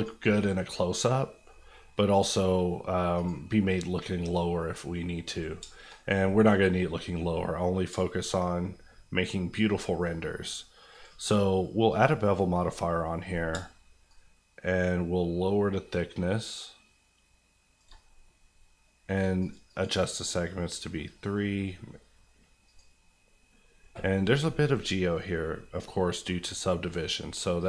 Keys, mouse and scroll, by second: 0.3 middle click, 0.6 scroll up 1, 1.7 scroll down 1, 3.1 click, 3.6 middle click, 5.3 click, 5.6 shift+click, 5.7 shift+middle click, 5.9 middle click, 5.9 scroll up 1, 6.3 middle click, 6.5 scroll up 1, 7.3 scroll up 1, 7.9-9.1 shift+scroll up 2, 8.0 shift+middle click, 10.9 click, 13.5-17.8 shift+drag, 17.9 click, 19.6 click, 20.1 click.